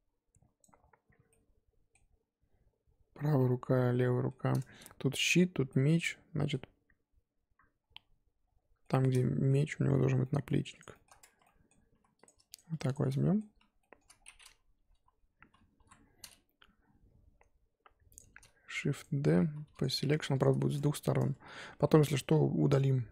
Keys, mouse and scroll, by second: 0.0-2.8 middle drag, 2.8-3.1 scroll down 1, 3.1-7.5 middle drag, 7.5-8.5 scroll up 2, 8.5 scroll up 1, 8.8-10.8 shift+middle drag, 10.8 click, 10.9 shift+middle click, 11.1 scroll up 1, 11.3 Tab, 11.4 middle click, 11.7 scroll up 3, 11.9 3, 12.2 click, 12.5 shift+click, 12.8 shift+click, 13.1-14.1 middle drag, 14.1-14.9 scroll down 1, 14.9 KP_3, 15.8 KP_1, 16.0-16.9 scroll up 6, 18.7 shift+d, 19.8 p, 20.1 Tab, 20.4 click, 20.5 shift+middle click, 20.9 Tab, 21.7 Tab, 22.2 g.